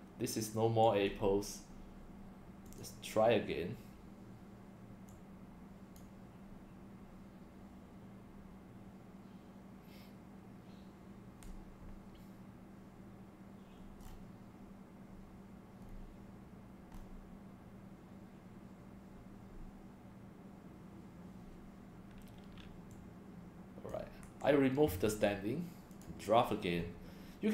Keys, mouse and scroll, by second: 1.1 scroll down 1, 2.7 click, 5.1 click, 14.0 scroll down 5, 15.8 scroll up 1, 16.9 scroll up 3, 22.9 click, 24.2 BackSpace, 25.9 click.